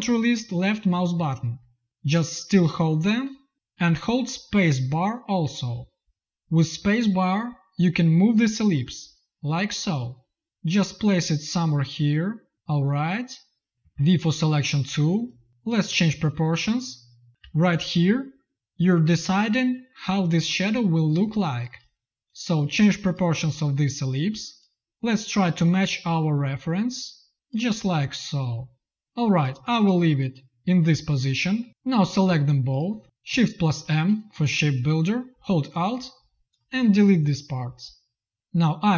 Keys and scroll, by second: 4.5 shift+space, 13.9 v, 17.5 z, 18.0 v, 21.1 space, 33.0 space, 33.5 shift+m.